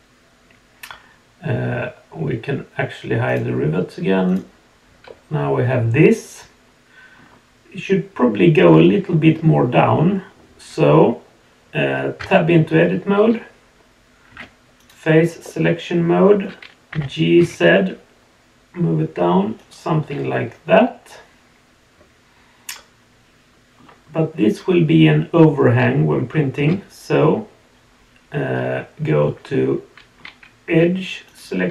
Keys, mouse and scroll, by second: 3.3 click, 4.2 click, 5.0-7.2 middle drag, 8.8-11.7 middle drag, 12.2 Tab, 14.8 click, 15.4-16.4 middle drag, 16.9 g, 20.3-23.8 middle drag, 28.6-30.2 middle drag, 30.6 2, 31.2 click.